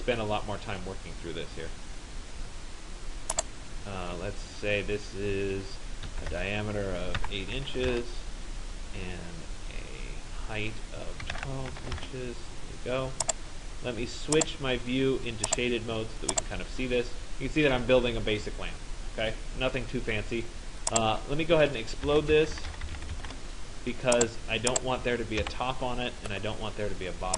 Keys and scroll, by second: 5.9 Return, 7.2 8, 7.9 Return, 11.3 2, 12.0 Return, 22.8 e, 23.3 Return, 25.5 Delete.